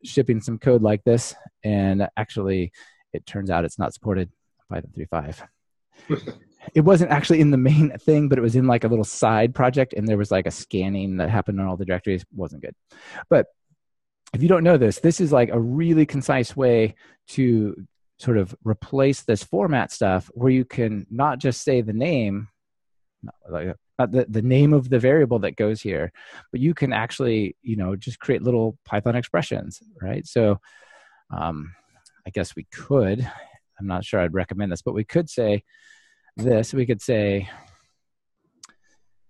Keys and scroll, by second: 33.3 ctrl+alt+shift+Right.